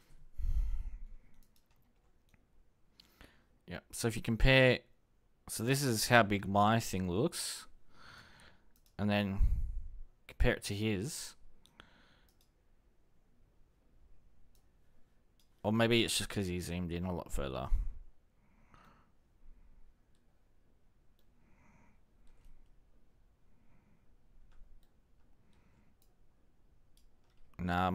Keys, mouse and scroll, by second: 9.0-10.8 ctrl+drag, 10.9 ctrl+click, 11.3 ctrl+click, 11.5 ctrl+click, 11.8 ctrl+click, 12.0 ctrl+click, 12.3 ctrl+click, 12.5 click.